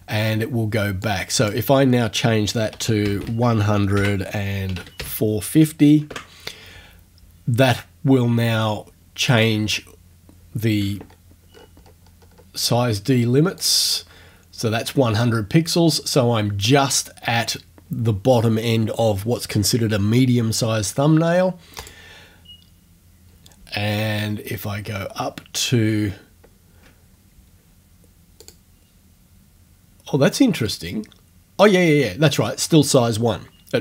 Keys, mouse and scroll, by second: 1.1 click, 2.8-5.0 typing, 6.1 Tab, 9.2 click, 11.1 ctrl+scroll up 2, 11.6-12.5 ctrl+scroll down 2, 13.6 click, 21.8 click, 24.2-25.0 ctrl+scroll up 2, 25.2 ctrl+scroll up 2, 25.7 ctrl+scroll up 2, 28.4 click.